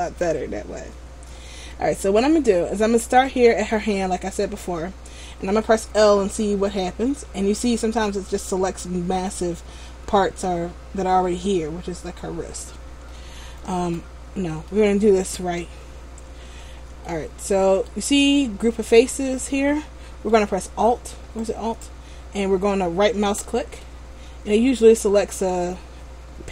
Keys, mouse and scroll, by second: 0.1 scroll up 1, 0.8-1.2 scroll down 1, 1.9 shift+middle click, 6.6 l, 13.8 a, 14.9 middle click, 16.1-17.0 scroll up 1, 17.2 shift+middle click, 21.6 alt+right click, 24.0 middle click.